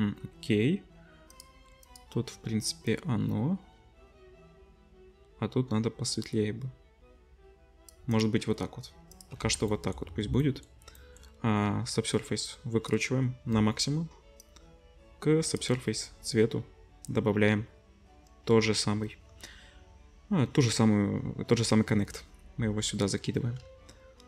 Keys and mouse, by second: 1.3-1.9 drag, 1.9-9.3 middle drag, 9.4 ctrl+s, 12.6-24.2 drag.